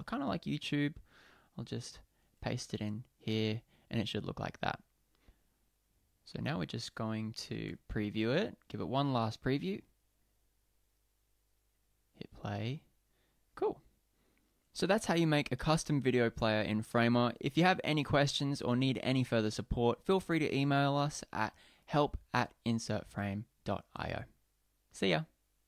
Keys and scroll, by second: 2.2 super+v, 7.6 super+p.